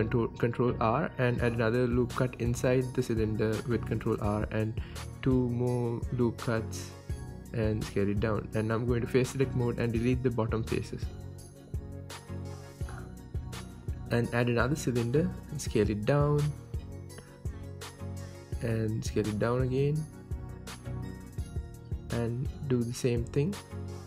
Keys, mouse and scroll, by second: 0.7 click, 1.1 ctrl+r, 3.4 click, 3.5 scroll up 2, 3.7-6.1 shift+middle drag, 4.4-4.8 scroll up 2, 4.8 ctrl+r, 6.1 click, 6.2 ctrl+r, 7.7 click, 7.9 scroll down 2, 8.1-9.7 middle drag, 8.6 Tab, 9.7 click, 10.7 x, 11.2 Tab, 11.4-17.2 middle drag, 11.8 KP_1, 12.1 scroll up 2, 12.4 scroll down 2, 13.1 shift+a, 16.0 KP_1, 16.6 s, 17.2 click, 17.3 g, 18.8 click, 18.9-20.7 middle drag, 19.2-19.6 scroll up 1, 19.8 scroll up 1, 20.0 s, 20.7 click, 20.8-22.7 middle drag, 22.7-24.0 drag.